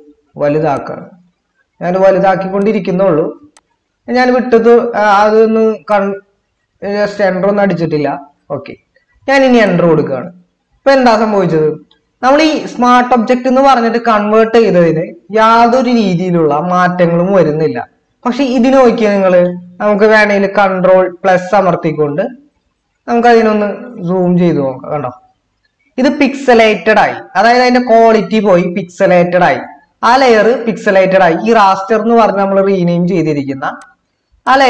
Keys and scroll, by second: 20.0 ctrl++.